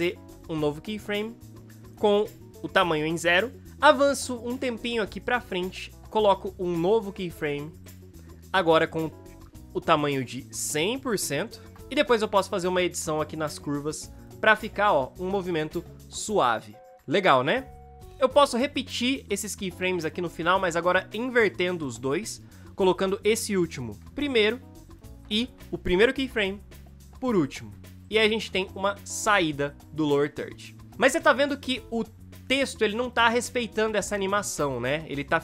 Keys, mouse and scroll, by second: 15.7 space, 23.6 ctrl+c, 23.9 ctrl+v, 25.4 ctrl+c, 27.1 click, 27.7 ctrl+v, 28.6 space, 34.0 space.